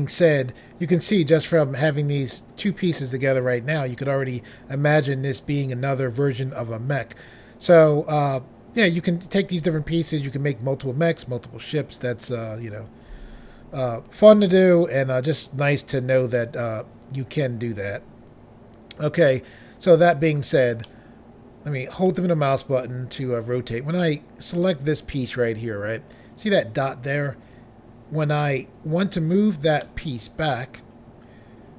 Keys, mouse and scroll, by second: 20.8 middle click, 22.4-22.8 scroll down 1, 24.6 click, 28.5-29.7 scroll down 1, 29.9 middle click, 29.9 scroll down 1, 30.9-31.7 scroll down 1.